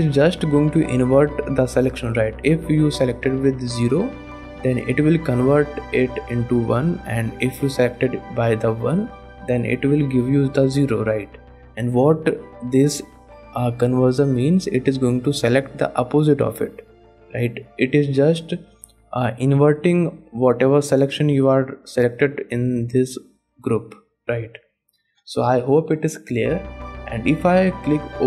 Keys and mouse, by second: 21.5 click, 24.6 click, 26.5 click, 26.5 middle click, 28.0 click.